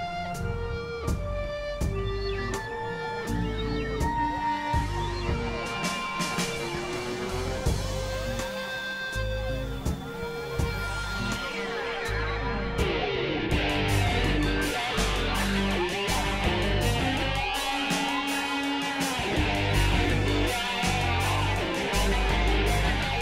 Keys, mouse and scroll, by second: 2.4 x, 2.4-5.8 drag, 5.0 x, 6.2 click, 8.8 click, 9.6 click, 10.3 click, 11.0 click, 12.0 KP_Divide, 13.4 click, 13.7 right click, 14.1 Tab, 14.1 middle click, 14.3 Tab, 15.2 KP_Divide, 15.8 KP_3, 16.2 KP_1, 17.0 x, 17.5-20.9 drag, 21.2 x, 21.8 click.